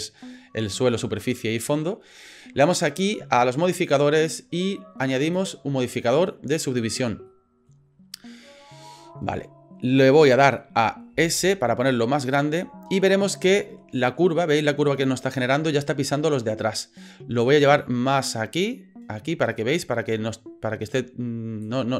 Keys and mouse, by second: 3.7 click, 5.3-6.8 drag, 7.3 middle click, 8.4 middle click, 10.3 middle click, 11.1 s, 12.7 middle click, 13.6 middle click, 14.1 middle click, 17.4 click, 17.7 click, 17.9 click, 18.1-19.2 drag, 19.3 click, 21.8 click.